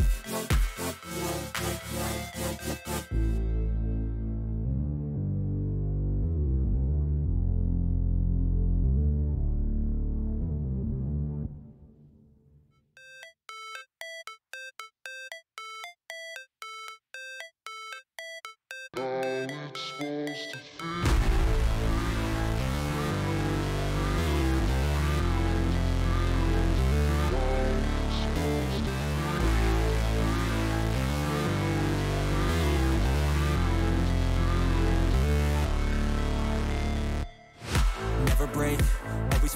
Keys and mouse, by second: 0.4 click, 1.5 click, 2.1 click, 4.0 click, 5.4 click, 7.3 shift+click, 8.5 click, 9.9 shift+click, 10.7 ctrl+click, 11.4 click, 14.1 ctrl+click, 14.9 click, 16.0 alt+shift+click, 16.5 alt+shift+click, 16.9 alt+shift+click, 17.2 alt+shift+click, 19.3 alt+shift+click, 19.9 alt+shift+click, 21.0 alt+shift+click, 21.7 alt+shift+click, 23.8 click, 26.4 click, 27.1 click, 29.7 shift+click, 31.3 shift+click, 32.2 click, 33.1 click, 36.0-37.5 drag.